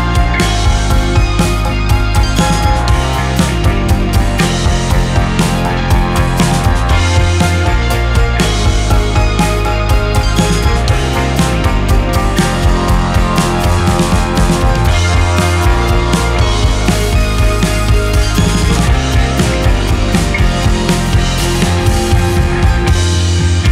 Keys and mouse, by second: 3.0-4.0 drag, 4.3-5.4 drag, 5.6-6.6 drag, 8.4-9.4 drag, 12.1-13.1 drag, 14.9-16.2 drag, 17.1 click, 19.5-20.5 drag, 21.2-22.2 drag, 22.7-23.7 drag.